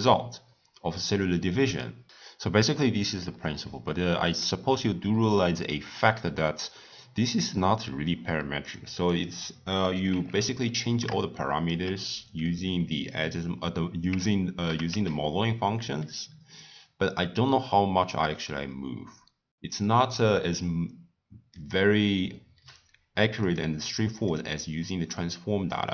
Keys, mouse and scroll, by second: 3.2-6.2 middle drag, 7.2 click, 8.7 click, 9.1 click, 10.1 Tab, 11.3-14.4 shift+middle drag, 14.6 g, 23.4 click, 24.1-25.9 drag.